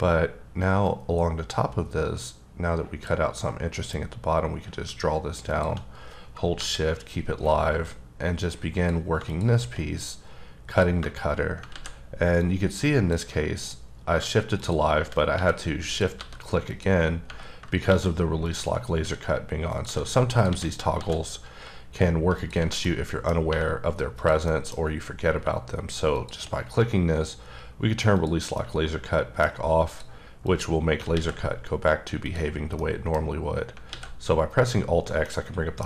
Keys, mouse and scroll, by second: 0.8 click, 5.9 scroll down 3, 6.5 KP_7, 7.8 click, 9.8 scroll up 1, 10.7 click, 11.7 ctrl+z, 12.4 click, 13.5 click, 14.5 shift+click, 15.4 r, 15.8 click, 16.2 g, 16.7 click, 17.9 shift+d, 18.4 click, 19.0-21.4 typing, 19.7 click, 20.3 click, 22.3 click, 22.8 middle click, 24.1 click, 24.5 middle click, 24.8-25.4 scroll up 1, 26.1 shift+click, 28.6 middle click, 29.9 click, 30.5 click, 31.1 alt+x, 32.2 click, 32.8 middle click, 33.3 scroll down 3, 33.9 alt+x, 35.2 middle click.